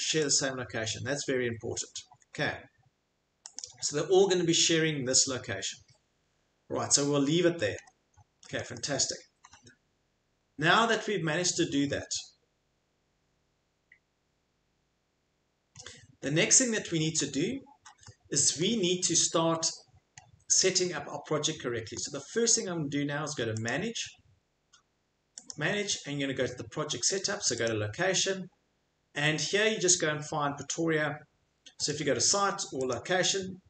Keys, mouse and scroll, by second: 0.3 click, 3.6 click, 6.2 scroll, 7.5 Escape, 7.5-8.8 scroll, 9.9 scroll, 15.7 middle click, 16.3 middle click, 17.2 Escape, 18.6 middle click, 19.7 middle click, 19.7 middle click, 20.2 middle click, 20.9 middle click, 21.0 middle click, 22.0 middle click, 22.4 Escape, 23.7 click, 24.9 scroll, 25.5 click, 27.7 click, 31.9 click, 32.9 click.